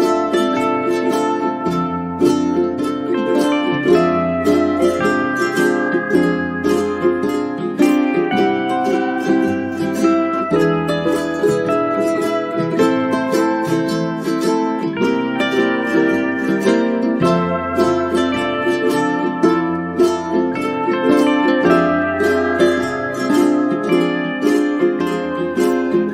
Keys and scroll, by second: 1.8 space, 3.5 space, 10.7 n, 11.1 space, 12.7 space, 15.6 space, 21.0-21.9 typing, 25.5-26.1 typing.